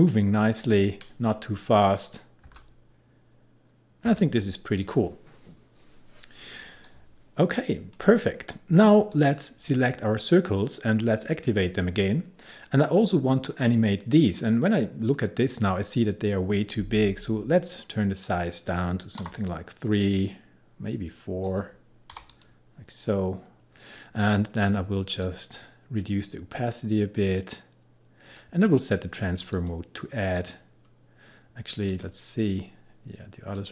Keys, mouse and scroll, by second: 6.9-9.2 drag, 18.3 click, 19.3 3, 19.4 click, 22.2 4, 22.4 click, 25.3-29.6 drag.